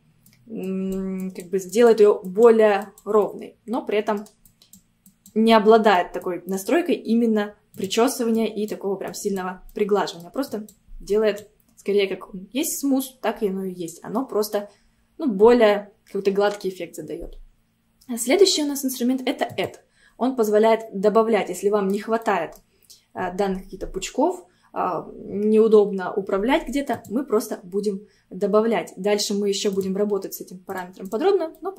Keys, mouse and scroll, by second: 0.7-3.3 drag, 3.3-4.5 middle drag, 4.5-5.5 drag, 5.5 middle click, 6.3-9.7 drag, 9.7 middle click, 10.6-14.3 drag, 19.5-21.8 drag, 21.8-22.2 scroll up 1, 22.2 middle click, 22.9 scroll up 1, 27.0-31.6 drag, 31.6 middle click.